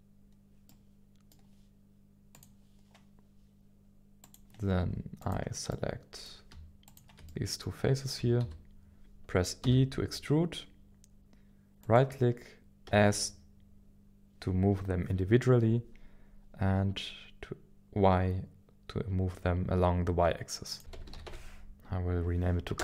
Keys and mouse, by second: 0.6 middle click, 2.3 click, 4.2 click, 5.2 click, 5.7 middle click, 6.9 shift+click, 7.3 middle click, 8.2 KP_1, 8.4 KP_7, 9.6 KP_7, 11.0 e, 11.8 right click, 16.0 s, 16.6 y, 20.7-22.8 drag.